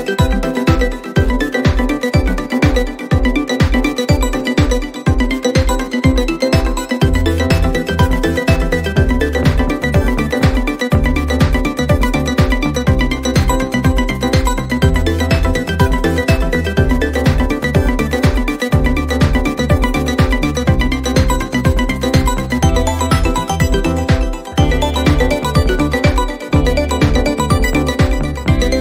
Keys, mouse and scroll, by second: 0.0-1.3 drag, 2.4-3.0 drag, 3.4 click, 3.7 click, 5.3 middle click, 6.3 click, 6.9 click, 7.9 scroll, 18.2 click, 21.2 click, 22.9 click, 24.6 click, 27.0-28.8 typing.